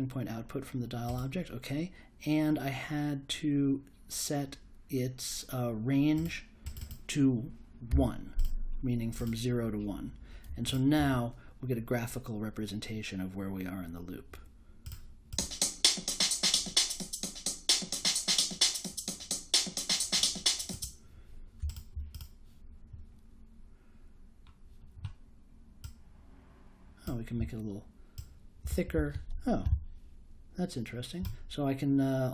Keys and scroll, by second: 7.9 1.